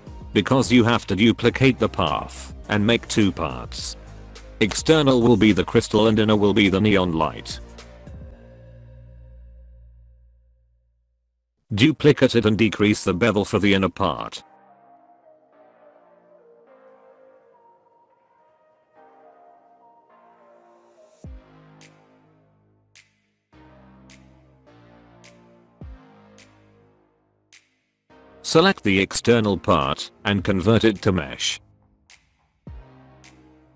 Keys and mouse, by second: 0.8 click, 1.5-2.4 middle drag, 2.9-3.2 middle drag, 3.4 middle click, 3.8 middle click, 4.2 Tab, 4.3 Tab, 4.5 a, 4.7 middle drag, 7.7 click, 10.2-10.7 middle drag, 11.3 shift+d, 17.0 click, 17.8 click, 18.5 click, 22.6-23.2 middle drag, 23.4 alt+a, 23.5 middle click, 23.8-25.1 middle drag, 26.3-26.7 middle drag, 26.8 middle click, 27.1 shift+click, 27.3 middle click, 27.4 middle drag, 27.8 alt+click, 29.1-29.7 middle drag, 30.3 F3.